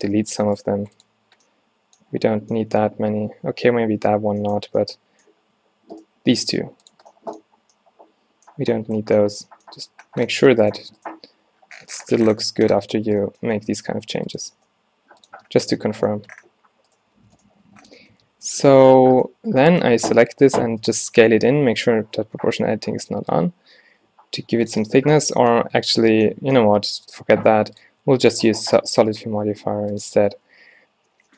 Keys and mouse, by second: 1.0 x, 2.3 a, 3.7 ctrl+z, 4.0 ctrl+z, 4.7 a, 6.4 x, 7.5 a, 10.0 Tab, 10.4 Tab, 11.2 g, 13.2 click, 13.5 click, 13.6 g, 14.7 g, 15.4 Tab, 16.4 Tab, 17.8 a, 18.2 Tab, 18.6 Tab, 20.1 e, 20.4 s, 21.6 o, 22.1 s, 24.9-25.7 drag, 25.7 Tab, 26.8 Tab, 27.0 x, 28.1 Tab.